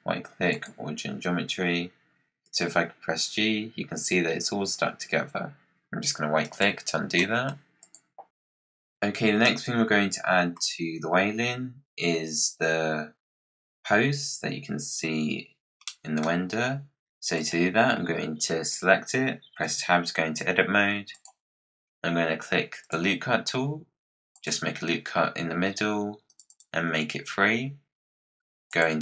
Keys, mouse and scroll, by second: 2.4 g, 7.1 middle click, 7.4-7.7 scroll down 1, 7.7 click, 9.4-12.5 middle drag, 15.8-16.4 middle drag, 16.4-16.7 scroll up 5, 17.4 click, 19.5 Tab, 21.0 click, 22.7-28.7 drag.